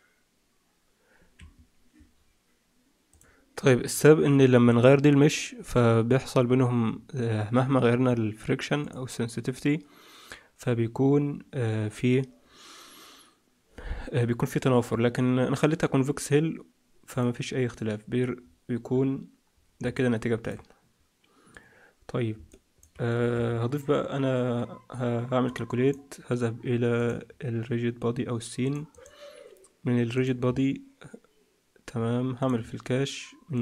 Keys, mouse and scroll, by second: 1.3 Escape, 5.1 click, 7.7-8.3 scroll down 2, 8.3-8.7 scroll down 1, 8.7 click, 17.0 click, 18.3-19.5 scroll down 4, 19.5-19.9 scroll down 4, 19.9 alt+middle click, 23.3 Escape, 25.4 click, 26.9 click, 28.8 click, 30.1 click, 30.3-31.7 scroll down 2, 31.9-33.5 scroll down 9, 32.3 click, 33.5 click, 33.5-33.6 scroll down 1.